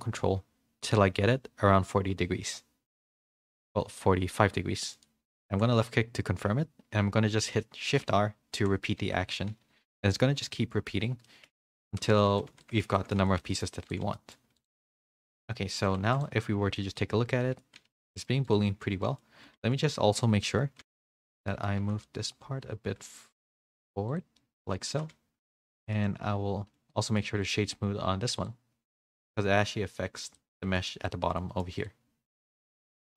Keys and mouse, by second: 8.0-10.4 typing, 11.3 middle click, 11.8 Tab, 12.0 z, 12.3 a, 12.5 a, 12.6 middle drag, 12.9 shift+middle click, 13.4 middle drag, 13.4 a, 14.1 middle click, 16.5 h, 16.7 middle drag, 17.4 middle click, 18.0 click, 18.4 right click, 19.0 middle click, 20.8 ctrl+z, 20.8 alt+h, 20.9 a, 21.0 a, 21.2 click, 21.8 g, 24.4 middle click, 24.9 g, 25.8 middle drag, 26.0-26.8 middle drag, 27.1 right click, 29.2 click, 30.3 click, 30.6 h, 31.0-31.6 middle drag, 33.0 middle drag.